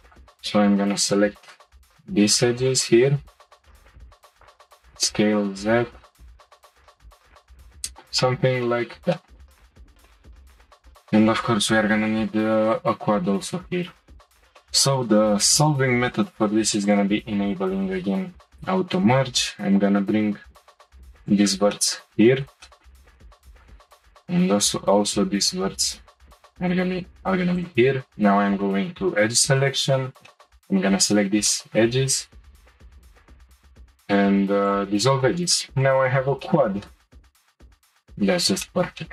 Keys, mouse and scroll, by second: 0.0 shift+click, 1.0 ctrl+click, 2.6 shift+click, 4.1 ctrl+click, 4.8 s, 7.0 middle click, 8.2-9.7 shift+middle drag, 9.7-10.1 scroll up 1, 10.1 shift+middle click, 11.0 scroll up 1, 14.6-16.8 shift+middle drag, 16.8 click, 19.0 g, 21.7-23.2 shift+middle drag, 23.5 click, 24.0 shift+click, 25.0 g, 26.5 shift+middle click, 27.3 2, 27.5 click, 30.3-32.9 middle drag, 32.9 shift+click, 33.1 Delete, 35.3 scroll down 2, 35.5 shift+middle click, 36.0-36.4 scroll down 1, 36.4-39.1 shift+middle drag.